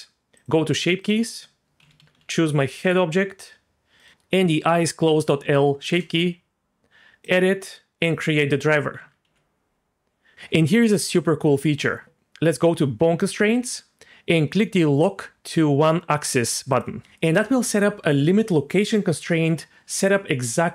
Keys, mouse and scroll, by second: 0.3 click, 1.0-2.8 drag, 4.0-5.9 drag, 7.2 click, 8.0 click, 9.2 g, 13.2 click, 16.7 click.